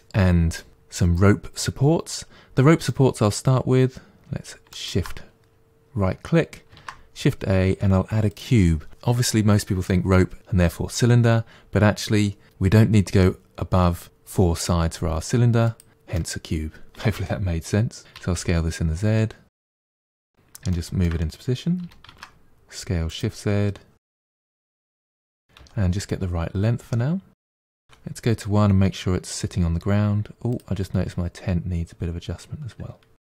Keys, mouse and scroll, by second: 2.0-4.6 middle drag, 4.6 shift+right click, 6.6 shift+a, 12.5 s, 16.0-16.5 middle drag, 16.5-18.0 scroll up 1, 18.0 s, 19.9 middle click, 20.2-20.6 scroll down 2, 20.6-21.7 shift+middle drag, 21.7 s, 24.2-25.5 middle drag, 25.5 g, 27.8 KP_1, 30.4 click, 30.9 Tab.